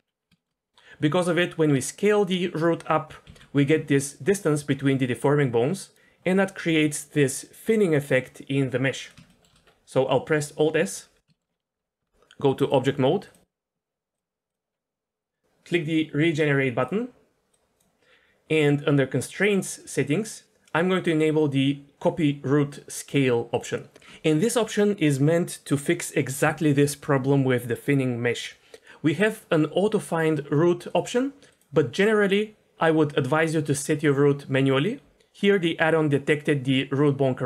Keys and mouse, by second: 0.3 shift+middle click, 3.2 ctrl+d, 3.3 ctrl+z, 4.1 click, 5.0 d, 5.1 d, 5.2 click, 5.2 d, 9.3 shift+middle drag, 10.8 alt+s, 11.3 shift+middle drag, 11.7 Tab, 12.0 Tab, 12.7-13.4 drag, 14.1-14.5 drag, 16.8-37.4 drag.